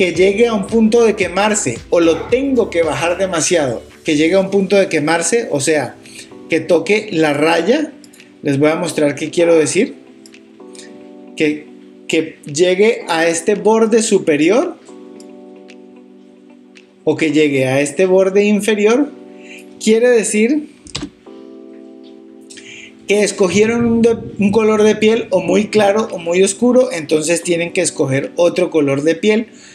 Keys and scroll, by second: 21.0 super+z.